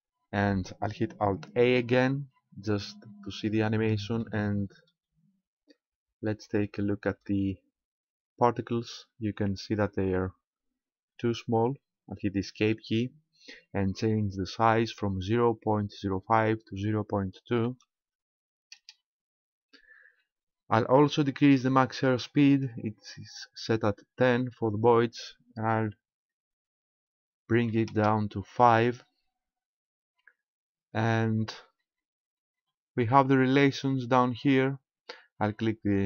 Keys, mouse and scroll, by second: 1.8 alt+a, 4.2 middle click, 6.3 shift+middle click, 7.9 scroll up 1, 12.6 Escape, 16.4 click, 24.8 click, 31.9-32.6 scroll down 4, 33.0-34.6 scroll down 1.